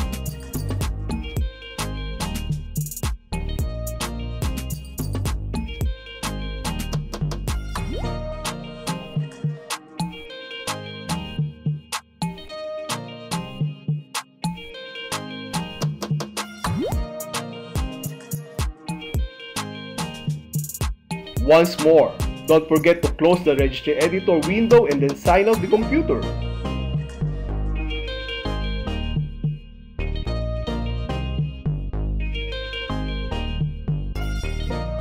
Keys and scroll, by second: 0.6 e, 2.4 Delete, 3.8 space, 5.5 Delete, 7.1 space, 8.4 Left, 9.8 Left, 10.8 Left, 12.2 Left, 13.4 Left, 14.5 Left, 15.5 Left, 16.8 Left, 17.7 Left, 19.2 Left, 20.5 Left, 23.9 BackSpace, 26.3 super+x, 28.0 u, 28.9 i, 32.9 space.